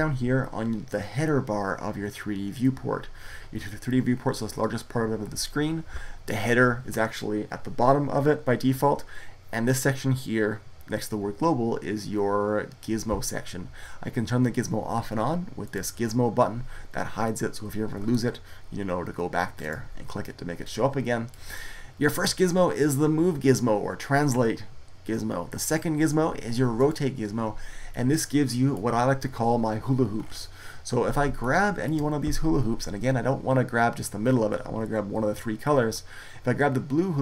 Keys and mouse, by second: 15.5 click, 17.3-19.0 middle drag, 19.5-22.0 drag, 28.5-37.2 drag.